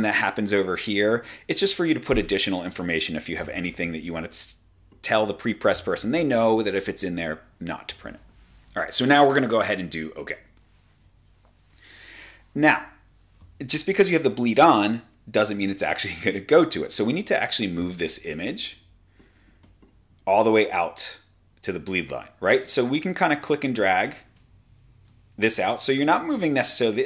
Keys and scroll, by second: 0.1 typing, 3.4 typing, 5.8 0, 6.0 Tab, 17.7 super+=, 24.9 super+z.